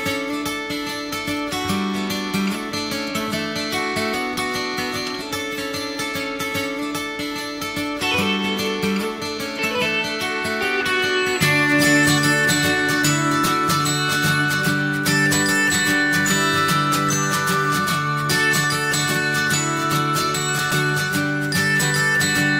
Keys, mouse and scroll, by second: 2.8 click, 3.1 middle click, 3.7 click, 4.1 click, 4.8 click, 5.3 click, 5.9 middle click, 6.5 click, 7.1 middle click, 7.4 scroll up 1, 7.9 click, 8.4 alt+middle click, 8.9 alt+middle click, 9.5-10.9 middle drag, 10.9 e, 11.7 middle click, 12.2 e, 13.2 middle click, 13.6 scroll up 1, 13.8 middle click, 14.4 click, 15.7 ctrl+shift+b, 18.9 click, 19.1-20.3 alt+middle drag, 20.3 click, 21.0 click, 21.3 click, 21.6 click.